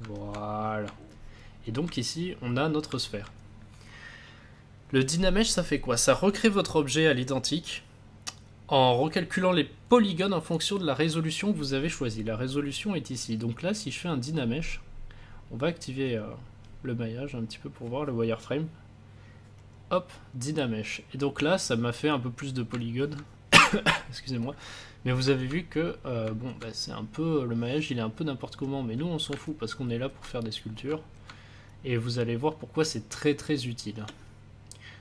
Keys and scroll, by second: 32.7 space.